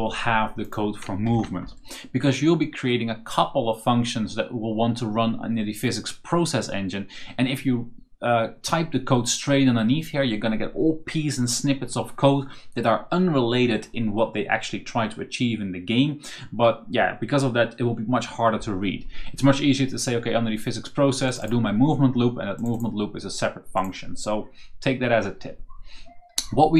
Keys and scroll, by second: 1.1 ctrl+shift+v.